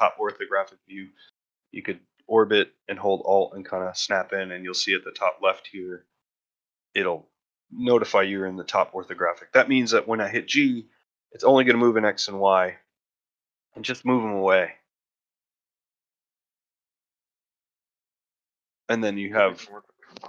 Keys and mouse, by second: 14.5 middle drag, 15.0-15.3 middle drag, 15.4-15.7 shift+middle drag, 15.9 a, 16.3 middle drag, 16.7 shift+middle drag, 17.8 middle click, 18.1 ctrl+middle drag, 18.4 shift+middle drag, 18.8 click, 19.3 middle click, 19.6-20.1 ctrl+middle drag.